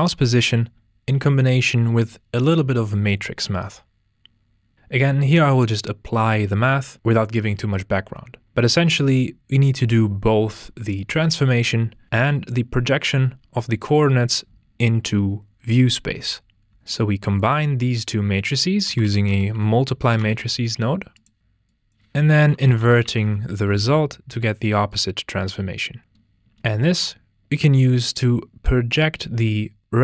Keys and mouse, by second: 2.3 shift+a, 20.8 click, 21.7 drag, 24.9 click, 29.0 click.